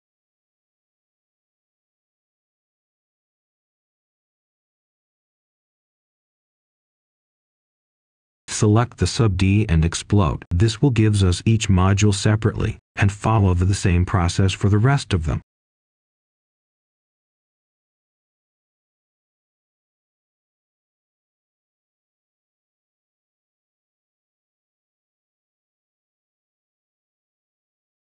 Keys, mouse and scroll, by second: 2.6 scroll down 1, 3.3 right click, 5.0-5.4 scroll up 1, 5.4 click, 11.2-11.6 scroll up 1, 12.2 shift+click, 13.7 typing, 14.3 Return, 16.2 click, 19.0-19.5 scroll down 1, 19.5-19.9 scroll up 1, 19.9 click, 22.9-23.2 scroll up 1, 23.6 shift+click, 25.2 Return, 26.8-27.9 drag.